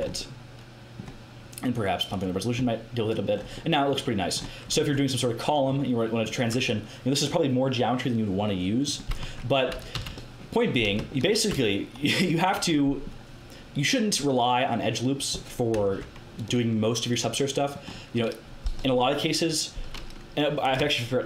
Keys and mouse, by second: 0.5 middle click, 2.6 middle click, 3.4-7.2 middle drag, 9.1 Tab, 9.9 a, 11.5 Tab, 15.7 Tab, 20.5-21.2 right drag.